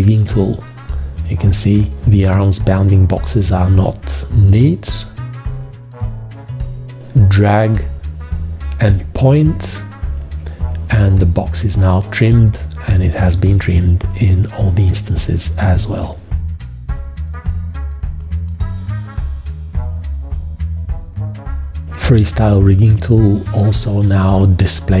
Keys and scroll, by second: 10.2 v, 15.3 F4, 19.0 v, 22.7 F4.